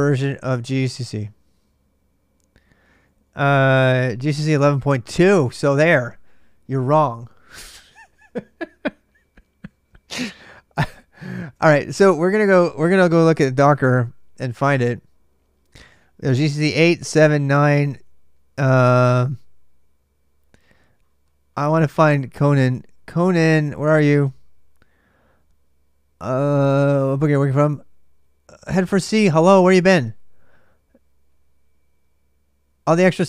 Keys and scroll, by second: 0.0-3.3 typing, 9.5-11.2 typing, 13.8 BackSpace.